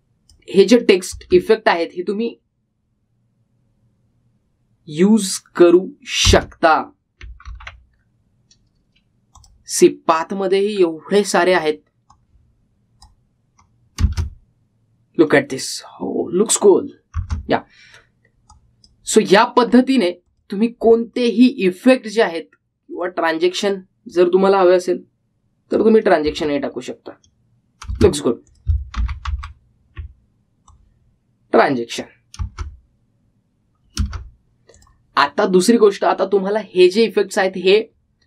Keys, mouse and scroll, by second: 2.3 space, 7.4 space, 8.6 ctrl+z, 9.4 scroll down 1, 10.5 click, 11.1-12.7 scroll down 1, 12.7-15.1 drag, 15.1 space, 18.3 space, 19.6 click, 20.8-21.4 scroll down 1, 21.4 click, 21.9-23.8 scroll down 1, 24.1-27.3 drag, 27.3 space, 29.6 click, 30.1 ctrl+z, 31.8-33.6 drag, 33.6 space, 35.9 click, 38.0 scroll up 1.